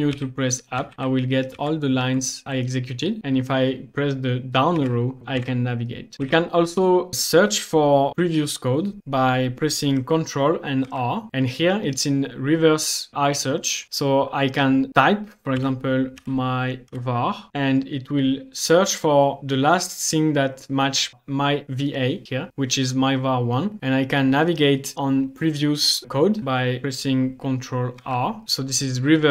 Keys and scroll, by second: 0.1 Up, 1.6 Down, 2.1 Down, 4.8 Down, 5.2 Down, 5.4 Down, 6.1 Down, 10.8 Up, 10.8 ctrl+r, 15.6-17.5 typing, 28.0 ctrl+r, 28.4 ctrl+r.